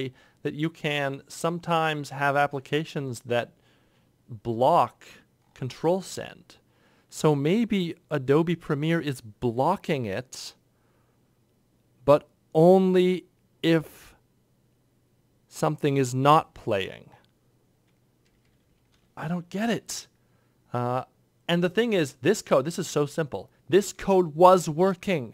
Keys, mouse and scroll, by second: 0.0 F1, 0.9 ctrl+F1, 1.7 ctrl+F1, 2.3 ctrl+F1, 2.9 F13, 3.7 ctrl+F1, 18.1 F10, 18.3 F10, 18.5 F10, 19.5 ctrl+F6.